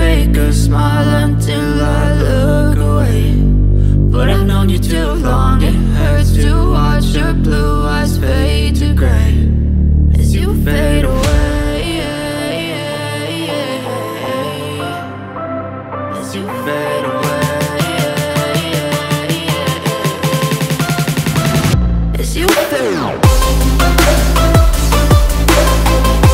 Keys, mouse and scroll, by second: 4.8 click, 4.8 typing, 10.3-16.3 drag, 11.5 typing, 15.3-16.1 typing, 18.0-19.2 drag, 19.2 ctrl+z, 19.7-26.3 drag.